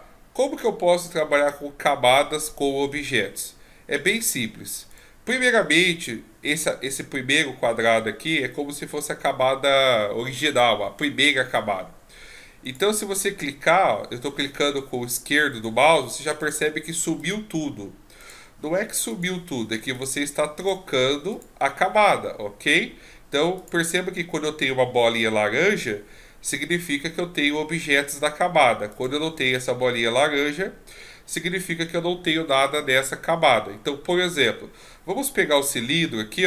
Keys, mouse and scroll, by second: 4.9 right click, 12.6 click, 15.5 click, 16.4 click, 17.2 click, 18.2 click, 19.1 click, 19.9 click, 20.6 click, 21.3 click, 23.6 click, 28.9 click, 34.3 click.